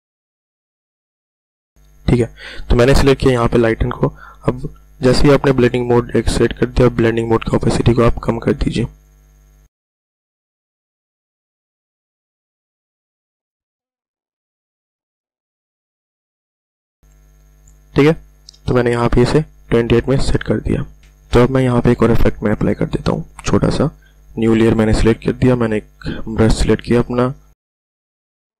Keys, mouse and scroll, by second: 0.2 scroll down 1, 1.1-2.3 scroll up 1, 7.2-13.4 drag, 13.7-14.0 scroll down 1, 18.5 Return, 19.9 click, 23.8 click, 25.1 b, 26.1-27.4 drag, 27.4-28.6 scroll up 1.